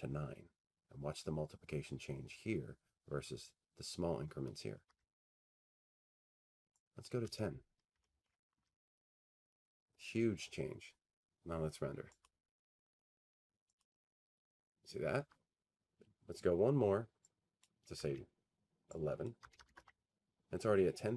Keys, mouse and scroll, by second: 6.8 Tab, 9.0-11.2 drag, 9.3-9.9 typing, 10.5 Tab, 14.3 click, 15.8 click, 19.6 click, 20.1 1.